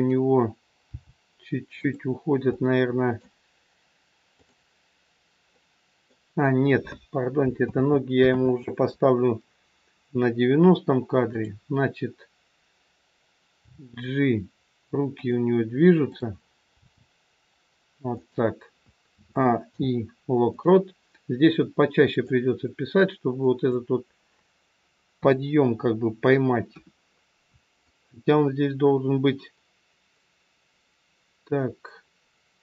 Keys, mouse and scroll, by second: 0.8 g, 2.6 middle click, 4.2 click, 7.6 ctrl+z, 8.3 ctrl+z, 11.3 click, 13.6 g, 16.1 click, 17.0 g, 19.2 a, 19.6 i, 22.2 click, 25.1 KP_3, 25.7-26.7 scroll down 1, 26.7 KP_1, 27.8 click.